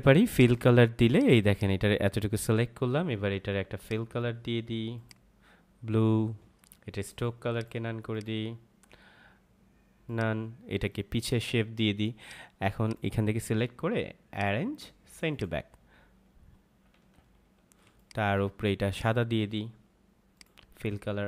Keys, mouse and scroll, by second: 0.3 click, 17.1 ctrl+=, 17.8 space, 17.9 click, 18.2 space, 18.9 click.